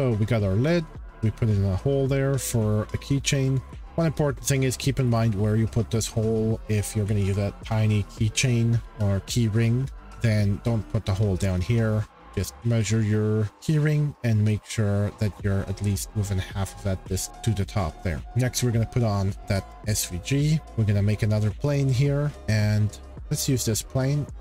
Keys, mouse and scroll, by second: 2.5 scroll, 3.3 scroll, 5.0-5.4 shift+middle click, 11.1-12.9 middle drag, 13.7 middle click, 17.2 scroll, 18.1 scroll, 19.5 scroll, 20.6 click, 21.4 shift+middle click, 22.4 shift+middle click, 23.1 click.